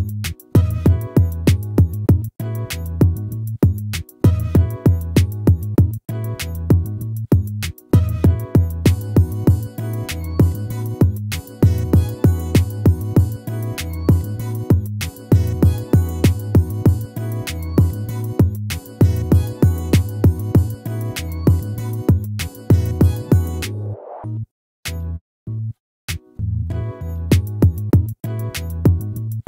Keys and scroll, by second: 1.5 ctrl++, 8.1 ctrl++, 21.7 ctrl+-.